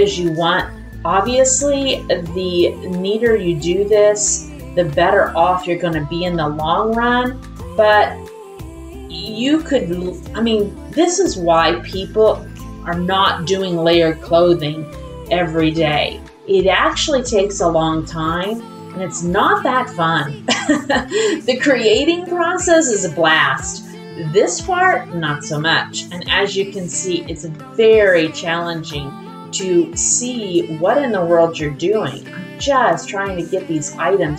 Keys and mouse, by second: 0.0 middle click, 1.3 click, 1.8 middle click, 2.8 click, 3.9 middle click, 5.0 middle click, 6.4-7.6 middle drag, 8.0-9.1 middle drag, 10.0 middle click, 11.5 click, 12.4 middle click, 13.6 middle click, 14.7 middle click, 16.8 click, 19.4 click, 20.2 click, 20.8 click, 21.1 shift+click, 21.6 click, 23.7 click, 24.7 middle click, 25.4 click, 26.3 middle click, 27.4 alt+z, 27.6-29.5 middle drag, 29.9 click, 30.3 middle click, 31.4-32.7 drag, 33.0 middle click, 33.8 middle click.